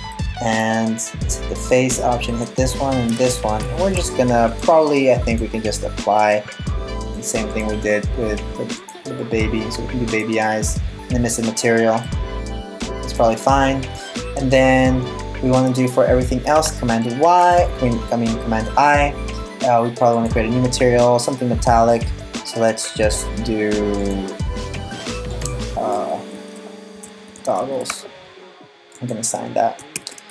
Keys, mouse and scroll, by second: 1.2 click, 1.9 right click, 2.9 shift+right click, 4.1 click, 6.7 click, 7.1 click, 8.4 click, 11.7 middle click, 16.3 super+i, 19.7 click, 23.6 click, 24.4 click, 26.9 g, 28.5 click, 29.6 Tab.